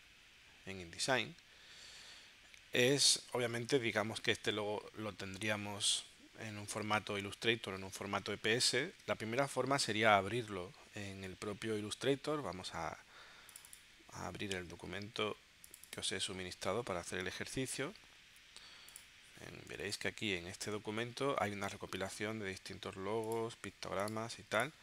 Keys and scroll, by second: 19.8 space.